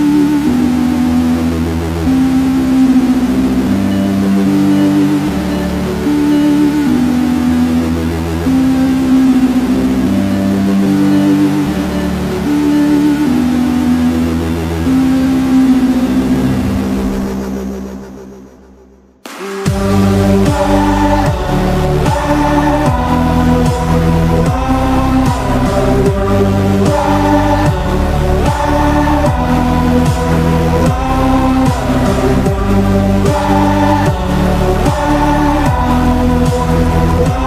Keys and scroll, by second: 6.3 z, 8.1 v, 9.8 p, 18.0 z, 24.4 v, 24.6 ctrl+e, 24.9 p, 26.0 z, 27.4 p, 33.8 0.